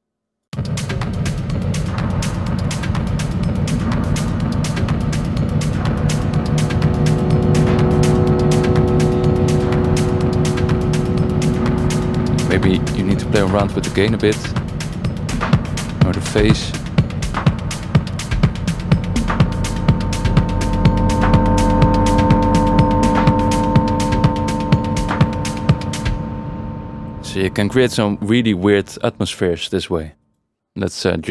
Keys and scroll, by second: 0.5 space, 26.1 space.